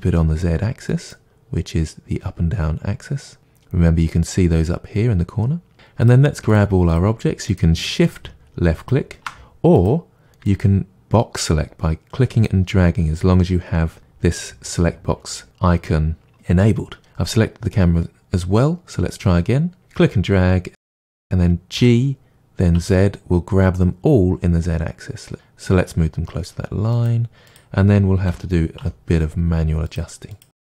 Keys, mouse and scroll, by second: 3.4 click, 6.0 drag, 6.5-7.7 shift+drag, 8.0 shift+click, 9.7 click, 10.4 drag, 19.2 click, 19.8 drag, 22.2 g, 27.4 click, 28.3 g, 30.3 click.